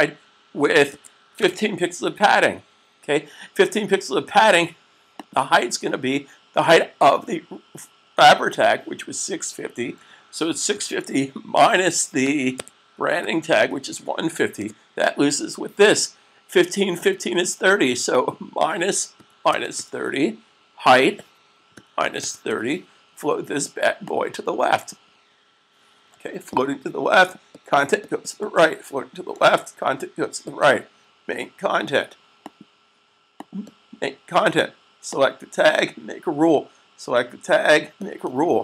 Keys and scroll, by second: 0.9-1.2 typing, 9.8-10.6 typing, 12.1-13.4 typing, 18.9-19.9 typing, 21.6-22.3 typing, 29.7 super+s.